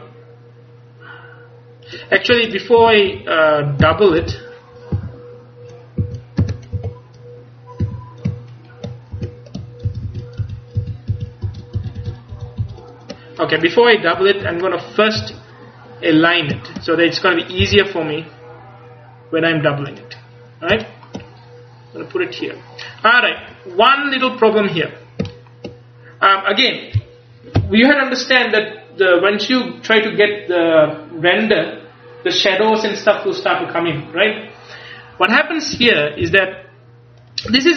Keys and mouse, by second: 2.0-3.9 drag, 2.4 ctrl+z, 2.9-5.0 typing, 6.1 a, 6.5 w, 7.9 a, 9.2 a, 10.0 ctrl+z, 10.1 ctrl+z, 10.5 ctrl+z, 11.2 ctrl+z, 11.5-12.1 ctrl+z, 12.4 ctrl+z, 12.7 ctrl+z, 14.3 Up, 14.5 KP_1, 15.3 KP_3, 17.7 g, 20.0 click, 20.9 click, 21.1 click, 23.5 Tab, 25.5 click, 35.8 Tab, 36.3 a.